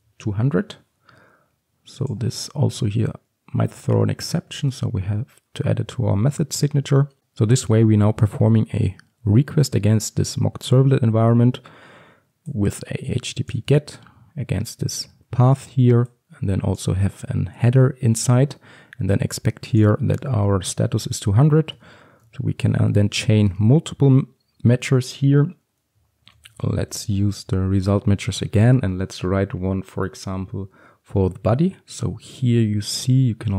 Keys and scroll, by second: 2.8 alt+Return, 6.7 alt+Return, 23.6 Return, 28.4 Return.